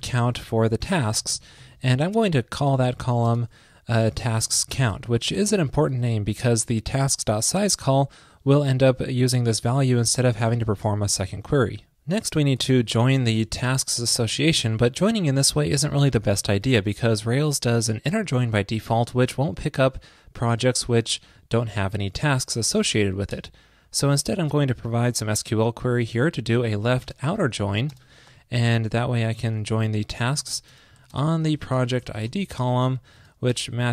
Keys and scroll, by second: 5.9 alt+shift+Left, 10.6 super+Right, 16.6 alt+shift+Left.